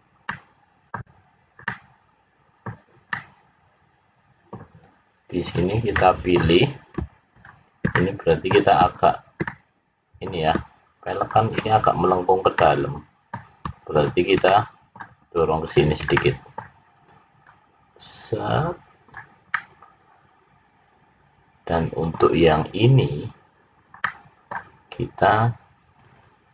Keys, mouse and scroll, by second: 0.4 middle click, 1.6 middle click, 3.1 middle click, 5.4 click, 5.9 middle click, 7.3 shift+click, 7.9 middle click, 8.8 shift+click, 9.4 middle click, 11.1 shift+click, 12.6 middle click, 13.9 shift+click, 14.4 middle click, 15.6 shift+click, 16.1 middle click, 17.4 click, 19.5 middle click, 24.0 middle click, 25.8 click.